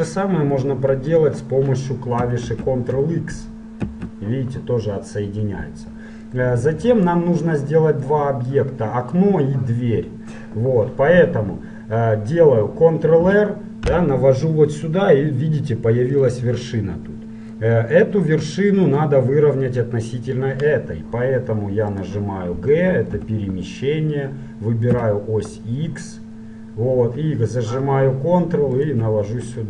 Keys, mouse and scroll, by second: 2.4 ctrl+z, 3.8 ctrl+x, 5.8-12.4 middle drag, 13.2 ctrl+r, 16.2 click, 16.8 click, 16.8 right click, 17.0 middle click, 17.7-19.5 drag, 22.0-24.0 drag, 23.2 g.